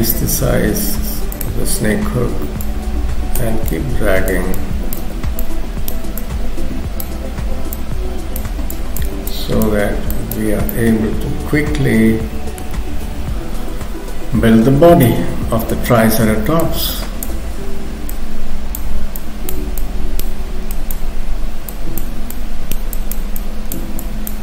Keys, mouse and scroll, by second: 2.7 click, 3.7 click, 5.4 click, 6.2 click, 8.8 click, 9.3 click, 10.5 scroll down 2, 10.7 middle click, 12.9 KP_3, 13.9 scroll down 2, 15.1 shift+middle click, 16.7 click, 17.5-18.0 scroll up 2, 18.2 click, 19.2 click, 21.7 click, 23.0 click, 23.4 click.